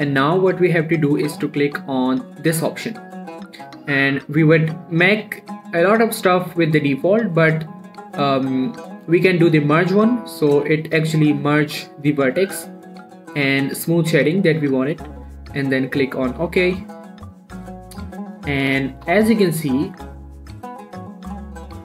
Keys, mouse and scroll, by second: 3.5 click, 10.0 click, 16.8 click, 17.9 middle click, 18.2 scroll up 1, 18.6 shift+middle click, 18.8-19.1 shift+scroll up 1, 19.1 scroll down 1, 19.2 shift+middle click, 19.6 middle click, 20.0 click, 20.2 middle click, 20.4 middle click, 21.0 click, 21.3 scroll down 1, 21.5 middle click, 21.6-21.8 scroll up 1.